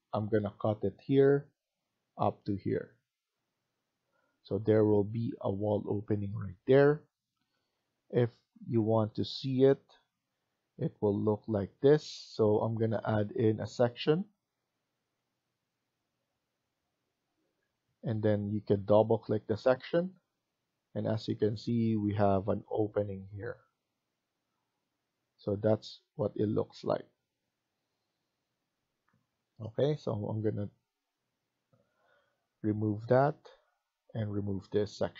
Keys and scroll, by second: 7.6 Escape, 7.8 Escape, 17.0 Escape, 17.3 Escape, 33.2 Delete.